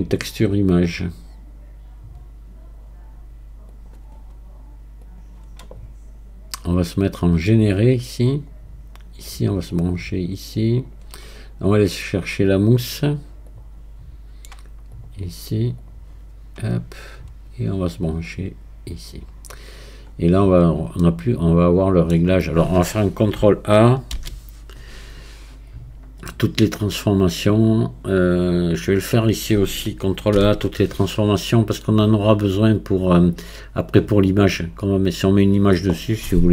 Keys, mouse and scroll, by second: 7.4-14.9 drag, 18.3-20.1 drag, 20.1-21.0 scroll up 1, 21.0-24.0 middle drag, 24.2 ctrl+a, 27.7-36.5 drag.